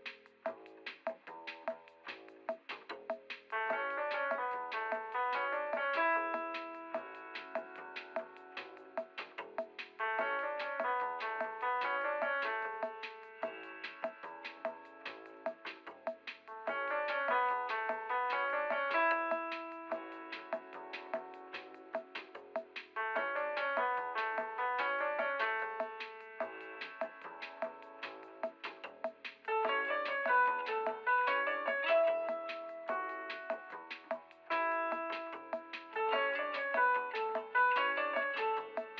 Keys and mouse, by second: 1.2 middle click, 1.2 f, 1.4 f, 2.1 middle click, 2.6 f, 2.8 f, 4.0 middle click, 4.6 f, 4.8 f, 5.4 f, 6.7 middle click, 7.6 f, 7.7 f, 8.8 shift+f, 9.7 middle click, 10.7 middle click, 11.3 middle click, 11.5 middle click, 11.5 a, 12.0 middle click, 13.7 middle click, 14.9-15.7 drag, 15.7 middle click, 16.5 click, 16.9-17.3 drag, 16.9 f, 17.4 middle click, 17.5 click, 17.5 f, 18.1 click, 18.3-19.4 middle drag, 19.5 click, 19.6 a, 20.2 f, 20.4 f, 23.0-24.0 middle drag, 24.5-25.5 drag, 25.5 middle click, 25.7 ctrl+z, 27.6 click, 31.7 ctrl+z, 31.8 ctrl+z, 31.8 f, 31.9 ctrl+z, 32.0 f, 33.3 ctrl+z, 33.4 ctrl+z, 33.4 f, 33.8 f, 34.4 click, 34.6 f, 36.5 f, 38.7 f.